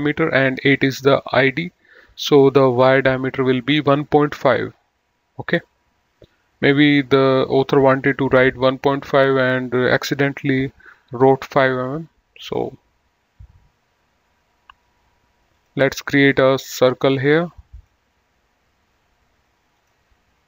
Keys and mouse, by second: 15.8 click, 17.2 click, 20.1 click.